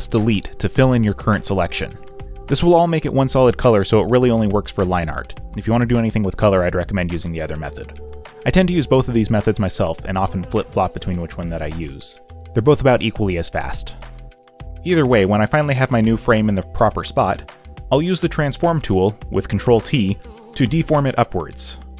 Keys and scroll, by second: 1.5 ctrl+d, 2.4 e, 3.4 b, 7.2 ctrl+t, 9.0 Return, 11.5 ctrl+c, 12.1 ctrl+v, 19.1 ctrl+t.